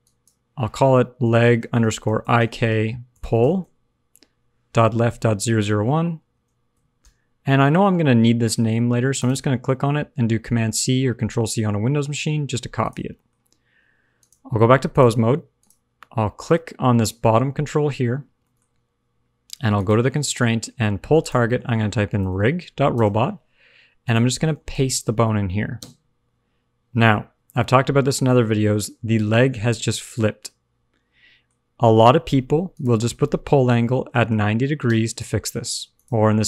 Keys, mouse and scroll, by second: 9.1 click, 13.1 middle click, 14.1 click, 15.5 click, 18.4 middle click, 19.7 click, 21.1 click, 24.0 click, 27.0 click, 27.4 middle click, 32.6 click, 35.6 click.